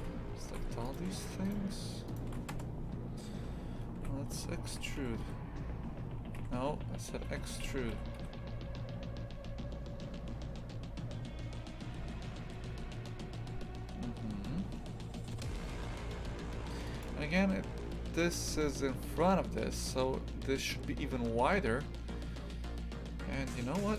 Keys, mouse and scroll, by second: 1.4 shift+right click, 2.1 shift+right click, 2.5 KP_0, 3.9 s, 5.0 s.